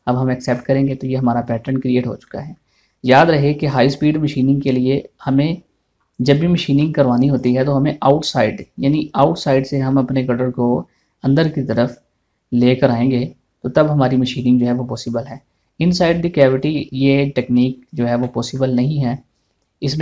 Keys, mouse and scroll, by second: 0.5 click, 1.1 scroll down 1, 1.5 shift+middle click, 2.4 shift+middle click, 7.0 middle click, 8.0 scroll down 1, 15.9 scroll down 1, 18.8 shift+middle click, 19.2 shift+scroll down 1, 19.9-20.0 scroll up 1.